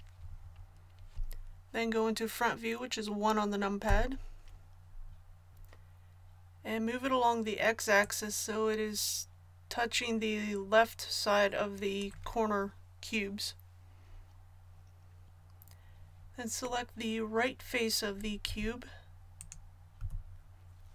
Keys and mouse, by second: 3.8 KP_1, 8.0-9.8 drag, 18.4 z, 19.9 z.